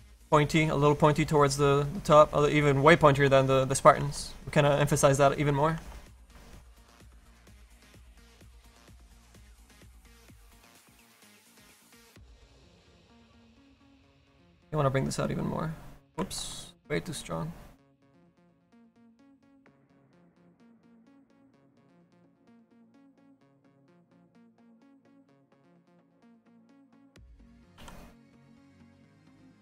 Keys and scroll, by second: 13.7 s, 14.4 s, 16.3 z, 18.1 s, 19.5 s, 23.8 s, 24.4 s, 25.0 s, 27.7 s.